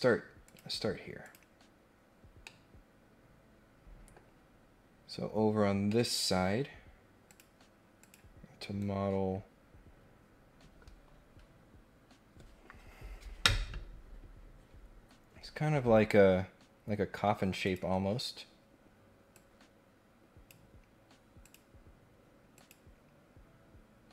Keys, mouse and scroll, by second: 0.4 click, 1.2 click, 2.4-4.1 middle drag, 5.5 scroll down 1, 5.7 scroll up 1, 5.9 middle click, 7.2 click, 8.0 click, 17.6 click, 18.2 scroll down 1, 19.3-20.4 drag, 21.4 click, 22.5 click.